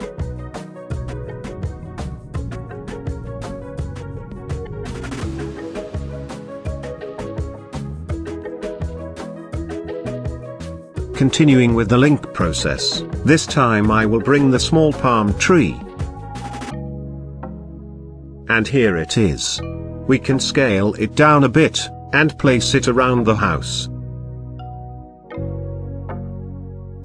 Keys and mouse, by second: 0.5-1.6 drag, 2.3 drag, 2.8-4.5 middle drag, 4.8 shift+click, 8.1-8.6 middle drag, 11.4-12.8 drag, 19.8 g, 20.3 shift+z, 21.1 click, 21.7-22.8 middle drag, 24.3 s, 25.1 click, 26.2 middle click, 26.8-27.0 shift+middle drag.